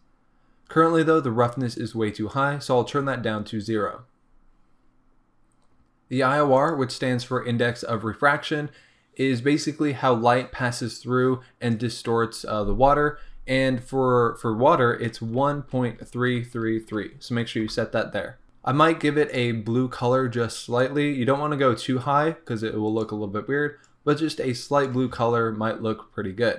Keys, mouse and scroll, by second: 4.0-7.0 scroll up 1, 17.6 KP_3, 18.4 Return, 26.0-26.5 scroll up 1.